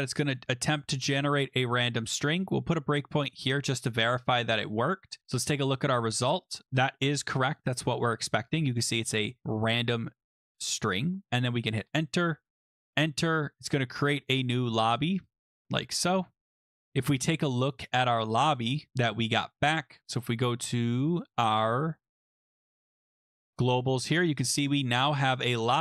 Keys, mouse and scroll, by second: 0.3 click, 0.8 click, 2.2 click, 3.4 click, 4.6 click, 7.8 click, 8.5 click, 10.5 click, 11.6 click, 12.8 click, 13.7 click, 14.4 click, 15.3 click, 16.0 click, 17.3 scroll down 2, 17.9-18.5 scroll down 5, 18.5-19.5 scroll, 19.5-20.0 scroll, 20.7-21.2 scroll, 21.9-23.5 scroll, 24.0 click, 24.4 click, 25.2 click.